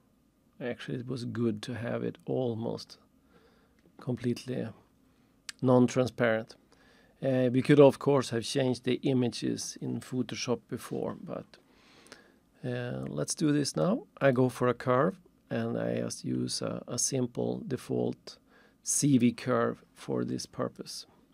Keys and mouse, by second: 2.9 click, 14.2 click, 20.8 click.